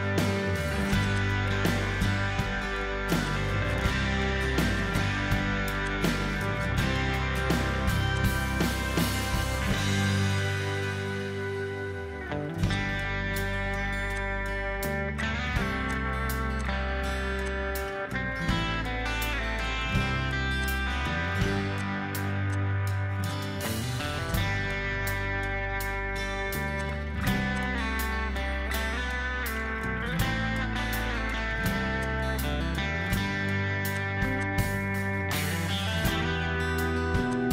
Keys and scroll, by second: 0.0-0.3 typing, 2.4 ctrl+g, 17.2 m, 18.3-18.8 typing, 19.2 Return.